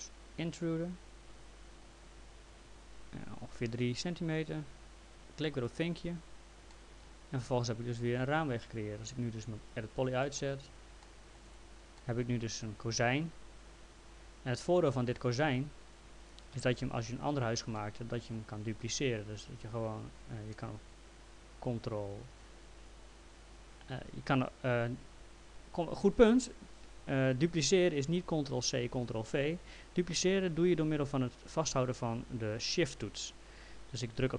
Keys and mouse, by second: 0.0 click, 5.7 click, 6.7 alt+middle click, 9.7 click, 10.2 middle click, 11.0 alt+middle click, 11.5 click, 12.0 alt+middle click, 15.5 click, 16.6 w, 17.8 alt+middle click, 18.9 click, 19.9 ctrl+z.